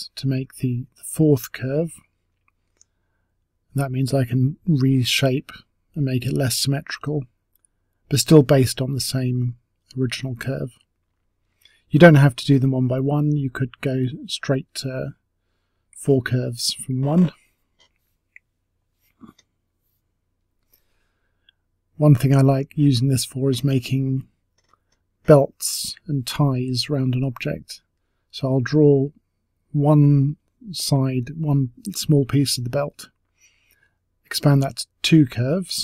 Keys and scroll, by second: 5.3 t, 12.7 Delete, 13.4 Delete, 23.7 space, 24.9 space.